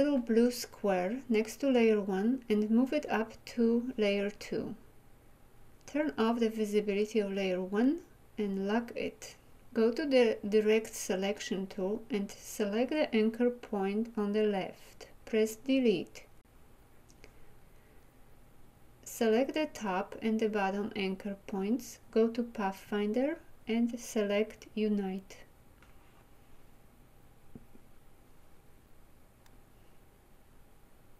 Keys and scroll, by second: 15.8 Delete.